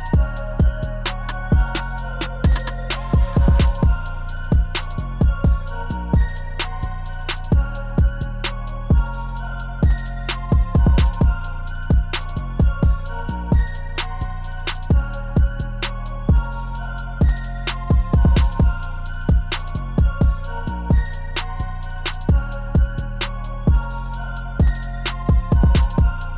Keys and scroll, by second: 6.9 0, 9.7 0, 12.4 ctrl+s, 19.3 ctrl+d.